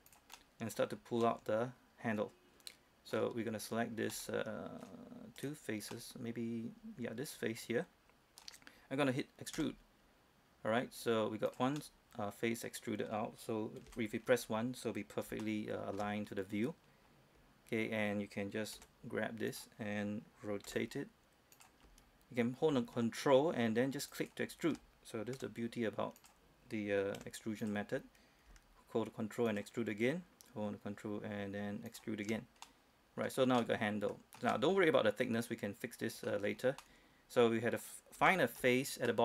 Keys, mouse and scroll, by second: 0.3 ctrl+Tab, 0.3 click, 0.6 middle click, 1.2 scroll up 1, 1.5-3.4 middle drag, 3.4-4.3 scroll down 1, 4.3 middle click, 5.6 right click, 6.2-8.7 middle drag, 8.7-9.8 scroll down 1, 9.8 e, 11.7 click, 12.0-14.0 middle drag, 14.1 KP_1, 14.5-14.8 scroll up 1, 14.8-15.5 scroll down 1, 15.6-18.2 shift+middle drag, 19.0 g, 19.7 click, 20.9 r, 21.8 click, 24.3 ctrl+click, 25.6 ctrl+r, 26.4 click, 27.4 g, 27.8 click, 29.7 ctrl+click, 32.9 middle click, 33.6 scroll down 1, 33.8 middle click, 34.6 scroll down 1, 34.7-36.7 middle drag, 36.7 scroll up 1, 37.0-38.4 middle drag, 38.5 shift+middle click, 39.0-39.2 scroll up 1.